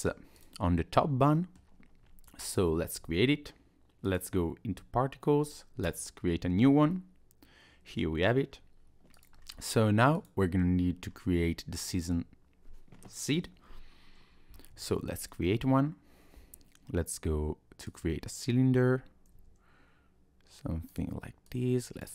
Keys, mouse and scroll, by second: 0.3 click, 1.4 middle click, 4.1 click, 5.8 click, 6.6 scroll up 2, 6.9 middle click, 8.4 scroll down 1, 9.1 click, 9.4 scroll down 1, 10.1 click, 11.1-11.6 scroll up 1, 11.7 shift+middle click, 14.5 scroll up 1, 14.7 shift+a, 18.5-19.3 scroll down 2, 19.3 s, 21.5 click.